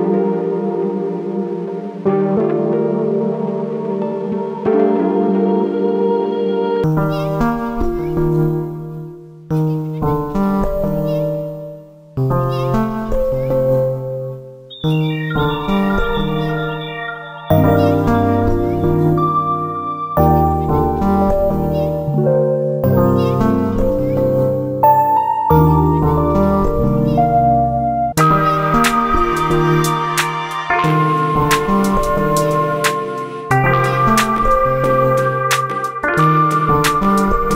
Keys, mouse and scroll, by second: 0.0 click, 0.2 g, 0.9 click, 1.1 g, 2.5 shift+middle click, 3.3 click, 3.9 g, 5.8 click, 6.0 g, 6.9-8.4 shift+middle drag, 8.4 click, 8.8 g, 11.3 click, 11.5 g, 13.2 click, 13.5 g, 15.2 click, 15.4 g, 16.8 click, 17.1 g, 18.1 shift+middle click, 18.7 click, 19.4 g, 21.0 click, 21.2 g, 23.5 click, 23.7 g, 25.7 click, 25.9 g, 27.3 shift+middle click, 28.2 click, 28.6 g, 31.9 click, 32.2 g, 33.5 click, 33.7 g, 34.7 click, 35.0 g, 35.7 click, 35.9 g.